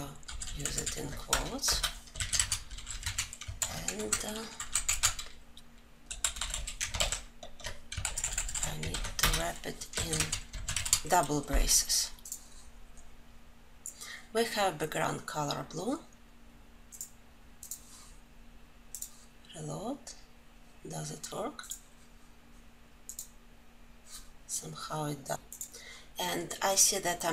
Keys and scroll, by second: 2.5 ctrl+alt+l, 3.4 ctrl+;, 6.8 ctrl+alt+j.